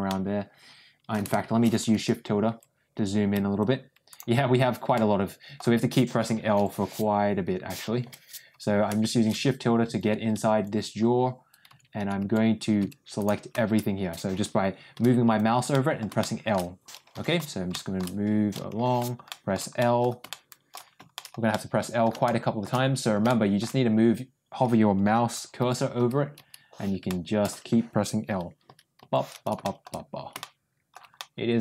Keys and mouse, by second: 0.0-1.0 middle drag, 4.8 shift+middle click, 6.5 l, 7.9 l, 14.9 l, 15.7 middle click, 16.1 middle click, 17.6 middle click, 18.7 l, 19.2 middle click, 19.7 middle click, 20.2 middle click, 21.0 middle click, 21.4 middle click, 22.1 middle click, 23.2 shift+middle click, 25.5 l, 25.9 l, 26.3 l, 27.0 middle click, 28.6 l, 28.9 l, 29.5 middle click, 30.3 middle click, 31.1-31.6 middle drag.